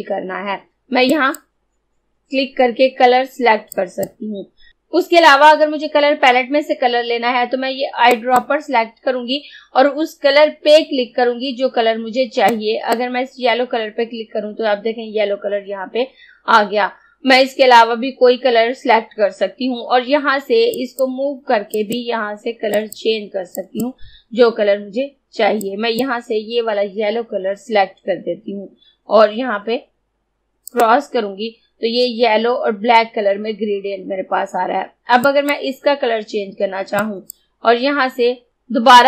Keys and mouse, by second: 1.2 click, 3.8 click, 8.2 click, 12.6-15.5 drag, 20.8-30.7 drag, 30.7 click, 35.4 click.